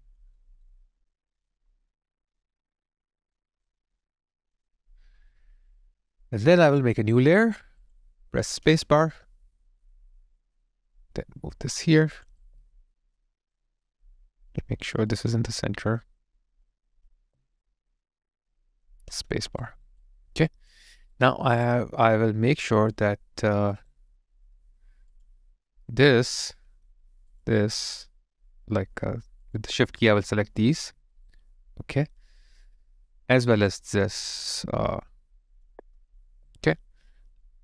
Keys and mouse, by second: 0.4 alt+right click, 0.8 alt+middle click, 1.3 alt+click, 8.7 space, 12.4 alt+click, 17.1 alt+click, 19.2 space, 19.6 alt+right click, 20.0 alt+click, 23.6 alt+right click, 24.1 alt+middle click, 27.3 ctrl+click, 30.6 shift+click, 30.9 alt+right click, 31.8 alt+middle click, 34.7 alt+middle click, 35.5 shift+click, 36.2 shift+click, 36.3 alt+right click, 36.8 alt+middle click, 37.5 alt+click.